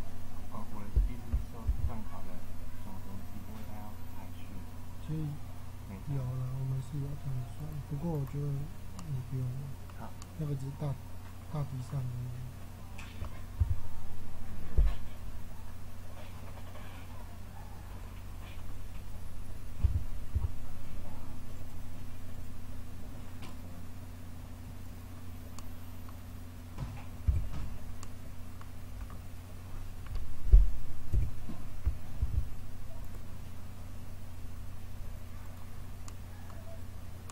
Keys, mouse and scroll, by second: 1.6 ctrl+r, 8.9-11.6 middle drag, 11.9-14.8 middle drag, 13.5 z, 16.7 middle click, 19.7 a, 20.2-21.5 middle drag, 20.2 a, 27.2 Tab, 31.0 Tab, 32.1 ctrl+r.